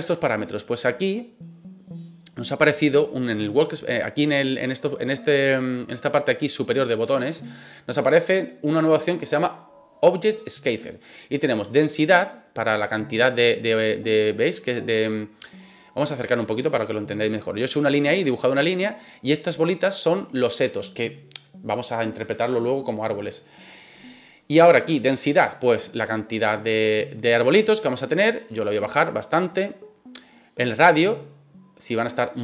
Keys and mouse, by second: 1.4 click, 11.7-14.2 drag, 15.9 middle click, 16.3 shift+middle click, 25.5-30.1 drag, 30.7-32.4 drag.